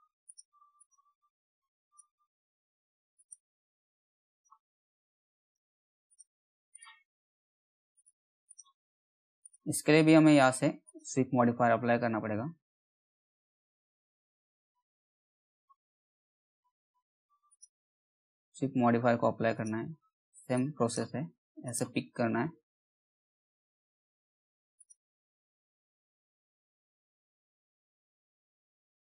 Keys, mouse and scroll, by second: 2.7 ctrl+click, 11.1 s, 13.0-14.0 typing, 17.0 click, 21.6 scroll down 1, 21.9 middle click, 22.4-23.3 scroll up 1, 23.3-24.3 scroll down 1, 24.3 click, 24.9-25.5 scroll down 1, 25.5 middle click, 28.0 alt+middle click, 28.6 scroll up 1.